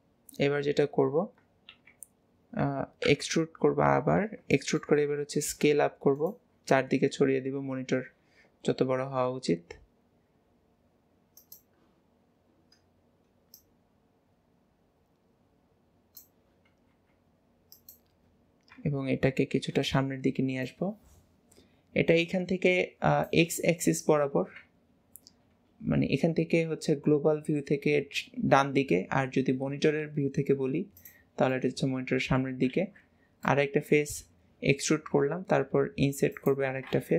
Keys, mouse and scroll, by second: 1.7 KP_1, 4.3-4.6 scroll down 1, 4.6 shift+middle click, 5.1-5.5 scroll down 3, 5.5 e, 12.1-12.5 scroll up 1, 13.6-14.9 drag, 18.8 KP_7, 18.9 KP_7, 20.7 click, 31.5-32.7 middle drag, 33.5-35.2 middle drag.